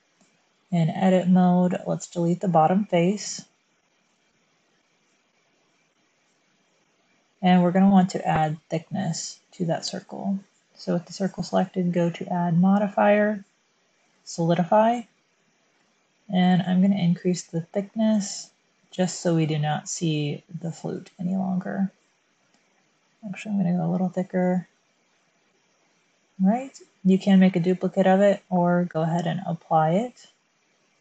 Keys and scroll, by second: 0.8 Tab, 3.1 x, 8.3 Tab.